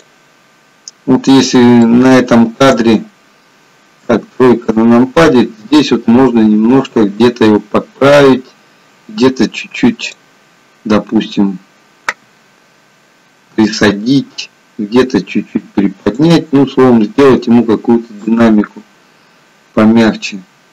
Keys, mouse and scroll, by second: 0.7-2.0 scroll up 2, 2.0 shift+middle click, 2.0-2.8 scroll up 1, 4.1 KP_3, 10.1 click, 13.8 g, 18.4 click.